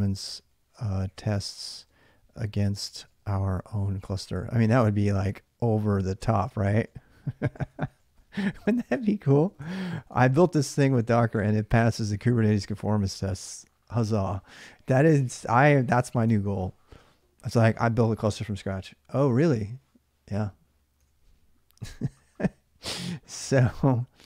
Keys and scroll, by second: 0.0-5.3 typing, 6.7-11.2 typing, 14.3 alt+Tab, 16.0 alt+Tab, 20.8 alt+Tab.